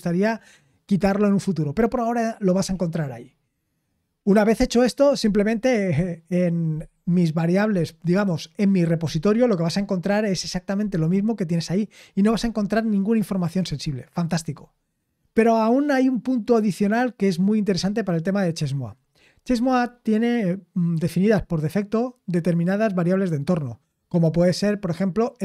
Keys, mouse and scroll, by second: 3.2-4.0 scroll down 4, 4.0-25.4 scroll down 1.